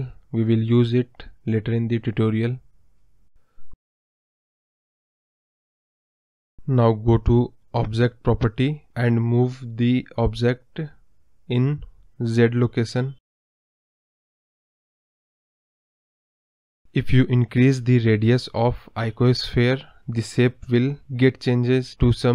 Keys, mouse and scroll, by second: 3.8 click, 7.7 click, 11.2-11.7 scroll up 6, 11.7-12.8 scroll down 9, 12.8 KP_Decimal, 13.3 scroll up 1, 13.5 click, 13.6 scroll down 1, 13.8 scroll up 6, 14.0 middle click, 14.2 scroll down 2, 14.5 scroll up 1, 14.5 middle click, 14.8 KP_0, 15.0 KP_1, 15.3-15.7 scroll down 6, 15.7-17.0 scroll up 1, 17.0-20.5 drag, 20.5-22.2 scroll down 2.